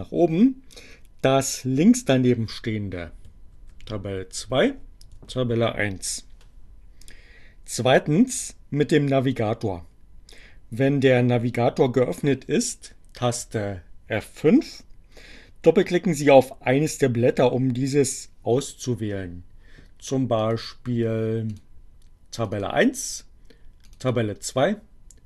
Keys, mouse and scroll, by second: 3.6 ctrl+Page_Up, 4.4 ctrl+Page_Up, 11.3 F5, 20.4 click, 21.6 click, 22.3 click, 23.2-25.2 drag.